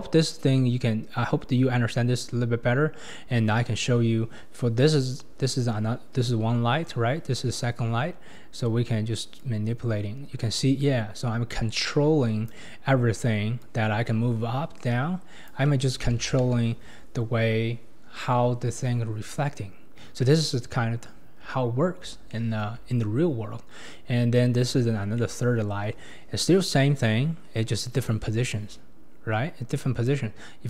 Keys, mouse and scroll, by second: 0.9-4.4 scroll up 7, 4.4-6.4 scroll down 15, 7.5-9.4 scroll up 16, 9.4-12.4 drag, 13.6-16.0 drag, 16.0 ctrl+z, 16.4 ctrl+z, 20.1-21.6 scroll down 2, 21.6 scroll down 1, 21.7-22.3 scroll up 1, 22.3-23.9 shift+middle drag, 23.9-24.3 scroll down 4, 24.3-24.8 middle drag, 24.8-25.2 scroll down 4, 25.2-25.6 middle drag, 25.6-26.7 scroll up 3, 26.7-28.1 scroll up 1, 28.1-30.0 scroll up 5, 30.0-30.6 drag.